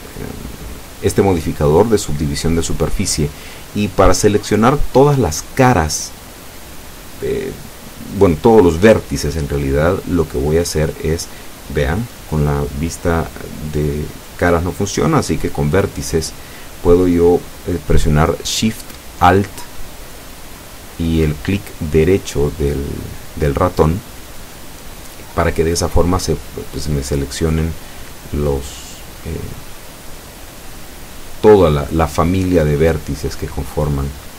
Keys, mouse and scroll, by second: 1.7 click, 4.7 click, 5.7-9.2 middle drag, 15.7 middle click, 17.4 click, 18.0 middle click, 18.9 scroll up 1, 20.0 alt+shift+right click, 20.5 alt+shift+a, 22.3 click, 24.6 alt+shift+right click, 25.1 alt+shift+right click, 25.7 alt+shift+right click, 26.3 alt+shift+right click, 26.8 alt+shift+right click, 27.8 alt+shift+middle click, 29.0 alt+shift+right click, 29.6 alt+shift+right click, 30.2 alt+shift+right click, 31.1 alt+shift+right click, 32.0-33.0 alt+shift+middle drag, 33.7 ctrl+z.